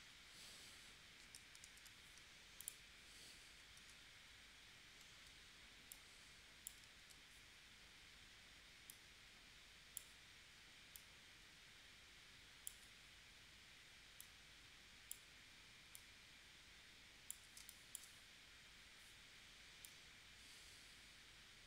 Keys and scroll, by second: 1.6 super+2, 3.7 shift+w, 7.0 super+z, 17.6 space.